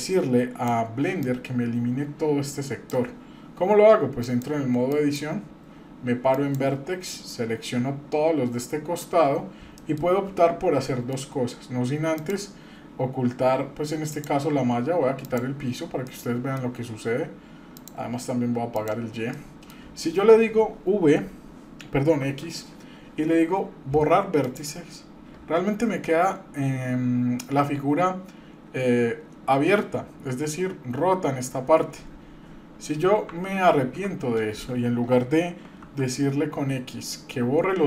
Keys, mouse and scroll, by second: 1.2-2.9 drag, 4.2-5.2 drag, 6.3 click, 7.3-8.9 drag, 9.3 scroll up 2, 9.8 shift+middle click, 10.1-10.8 scroll up 1, 10.8 middle click, 12.1-13.3 drag, 14.1-15.6 drag, 16.1 middle click, 17.7-19.1 drag, 19.3 middle click, 22.2 x, 33.7 ctrl+z, 35.8 x.